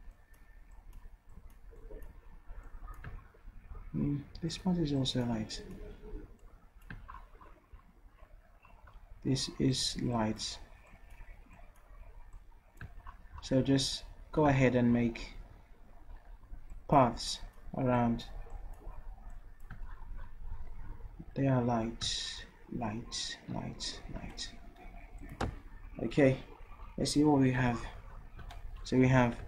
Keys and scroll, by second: 29.1 v.